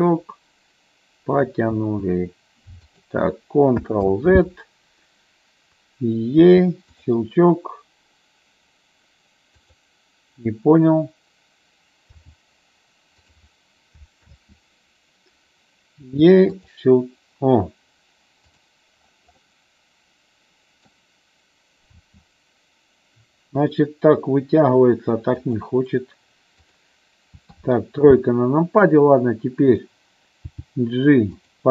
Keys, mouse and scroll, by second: 0.2-1.5 drag, 1.9 e, 3.0 click, 4.2 ctrl+z, 6.6 w, 9.7 click, 12.3 g, 13.3 click, 14.5 ctrl+z, 16.3 e, 16.7 click, 18.7 click, 19.4-21.1 middle drag, 22.2 e, 25.6 click, 27.5 KP_3, 30.6 g, 31.5 click.